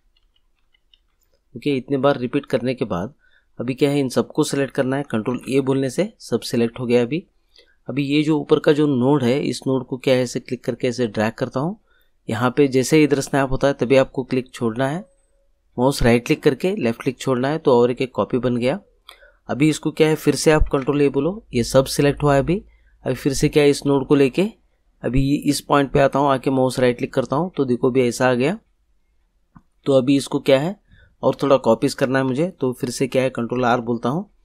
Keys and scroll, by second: 5.3 ctrl+a, 20.6 ctrl+a, 33.4 ctrl+r.